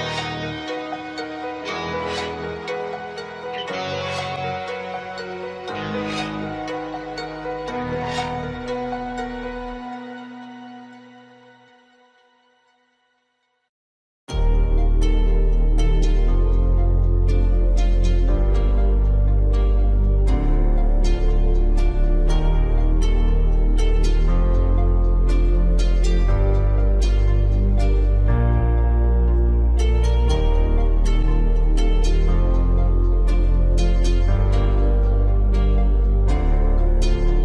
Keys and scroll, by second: 6.0 ctrl+t, 13.3 ctrl+0, 31.4 ctrl+0.